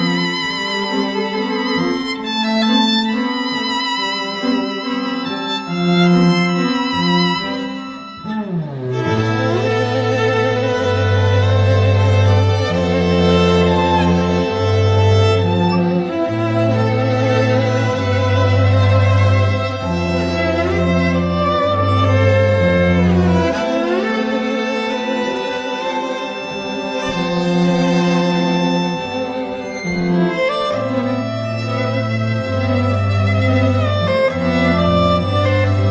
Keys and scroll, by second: 29.1 z, 30.1 z.